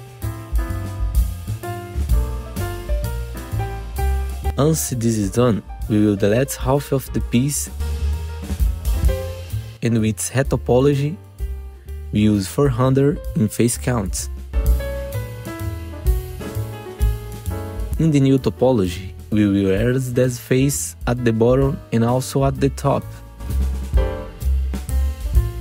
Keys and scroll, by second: 0.5 Delete, 1.6 F4, 4.4 1, 7.7 Delete, 10.3 F3, 11.1 1, 13.7 BackSpace, 14.3 4, 14.7 Return, 15.6 F4, 17.1 f, 17.6 F4, 19.2 1, 22.5 Delete, 23.1 4, 24.1 Delete.